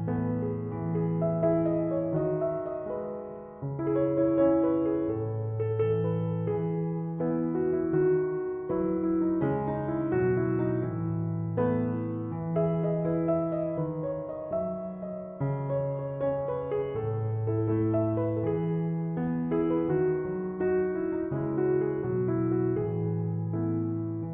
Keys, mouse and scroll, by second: 9.8 1, 10.1 8, 10.4 0, 10.7 Return.